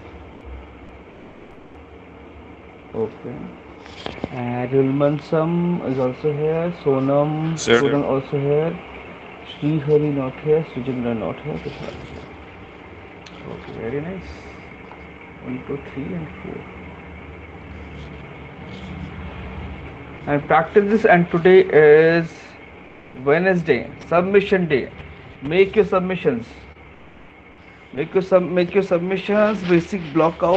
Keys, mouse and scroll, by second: 10.2 click, 11.0 click, 11.6 middle click, 12.4 middle click, 13.6 click, 14.7 middle click, 14.9-15.6 scroll, 15.6-16.9 scroll, 17.9 click, 18.7 ctrl+v, 18.9 scroll, 19.0 middle click, 19.1 middle click, 20.5 click, 22.5 click, 27.4 click.